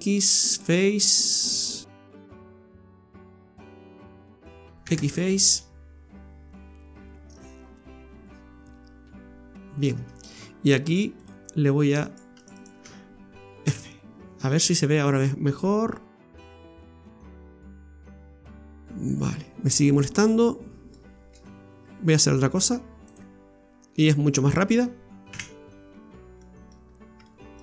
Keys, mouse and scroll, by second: 1.6 right click, 1.9 alt+shift+right click, 2.6 right click, 4.0 alt+shift+right click, 4.4 alt+shift+right click, 4.8 x, 5.6 middle click, 11.3 click, 12.0 right click, 12.4 alt+shift+right click, 12.5 alt+shift+right click, 13.7 f, 14.1 scroll down 2, 14.4 middle click, 16.4 click, 18.0 KP_Divide, 19.1-19.5 scroll up 2, 20.0 scroll down 2, 20.3 middle click, 21.3 Tab, 21.8-22.1 scroll up 1, 23.1 click, 25.3 KP_Divide, 25.9 scroll up 3, 26.4 middle click, 26.8 scroll up 2, 27.2 shift+middle click.